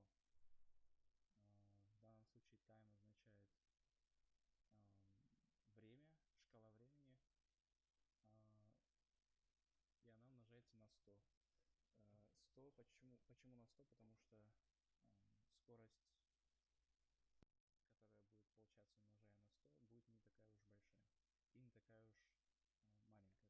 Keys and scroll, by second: 0.3 /, 1.2 BackSpace, 1.6 *, 3.2 Left, 4.3 Right, 4.8 Left, 5.2 shift+Right.